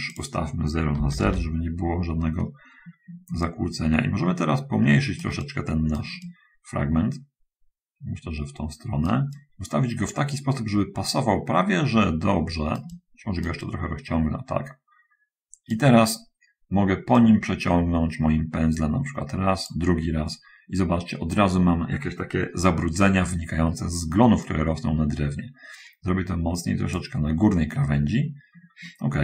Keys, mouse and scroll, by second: 0.4 click, 1.1 Return, 1.1 0, 3.7-6.4 shift+middle drag, 6.5-9.5 shift+middle drag, 9.6-16.1 shift+middle drag, 17.5-20.1 drag, 24.7-27.4 drag.